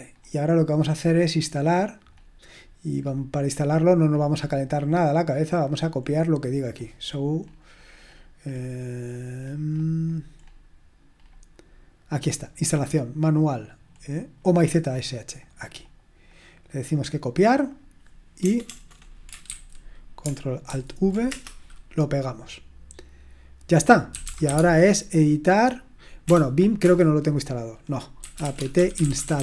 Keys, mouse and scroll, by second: 0.1-2.1 scroll up 1, 2.1-4.1 scroll up 1, 4.1-5.7 scroll up 1, 5.7-6.5 scroll up 1, 6.5 scroll up 1, 6.6-9.1 scroll down 2, 9.1-9.8 scroll down 1, 9.8-11.2 scroll down 1, 11.2-12.0 scroll down 1, 12.0-13.8 scroll down 1, 13.8-15.4 scroll down 1, 15.4-16.7 drag, 16.8 click, 17.0-18.4 drag, 18.4-18.8 typing, 19.4 ctrl+c, 20.3 typing, 20.7 ctrl+alt+v, 21.3 Return, 23.8-24.9 typing, 26.2 BackSpace, 26.8 Return, 27.9-29.4 typing.